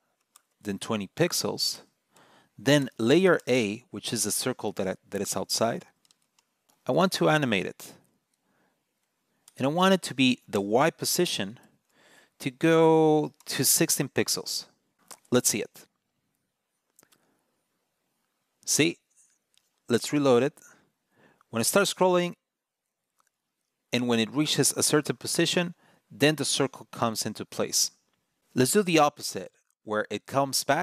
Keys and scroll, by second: 19.8 super+r.